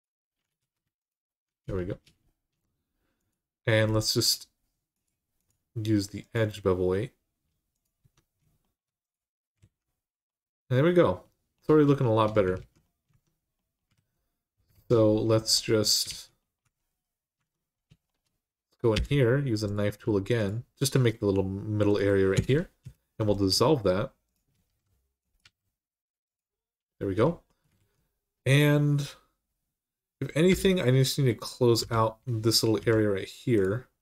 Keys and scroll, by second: 0.4 ctrl+z, 7.8 Tab, 9.4 alt+z, 12.4 alt+z, 12.9 Tab, 13.7 alt+z, 15.9 alt+z, 16.4 Tab, 17.1 Tab, 18.7 k, 21.2 typing, 22.1 Return, 22.6 Return, 24.5-25.2 typing, 27.5 alt+z, 30.3 l, 31.6 h, 32.6 k.